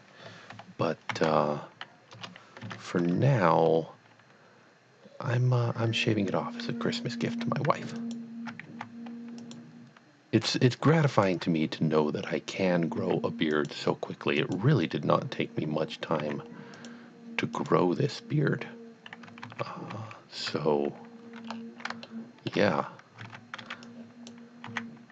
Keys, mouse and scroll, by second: 1.1 shift+d, 2.1 KP_Enter, 2.6 Tab, 3.6 scroll up 1, 7.7 scroll up 1, 8.0 alt+click, 8.7 x, 9.4 click, 11.1 alt+click, 13.0 x, 13.6 click, 14.4 click, 16.2 x, 16.7 click, 17.6 click, 19.4 ctrl+z, 19.9 ctrl+z, 21.5-21.8 scroll up 2, 22.1 shift+middle click, 22.8-23.2 scroll down 1, 23.2 alt+a, 23.7 b, 23.9 click, 24.7 x.